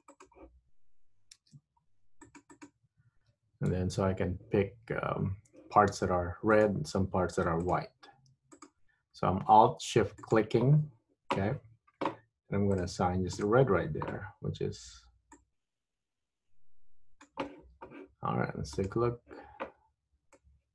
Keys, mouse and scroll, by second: 1.6 ctrl+r, 3.8 3, 6.7 click, 7.8 alt+click, 8.6 alt+shift+click, 10.3 alt+click, 12.9 click, 13.4 click, 15.4 click, 19.0 click.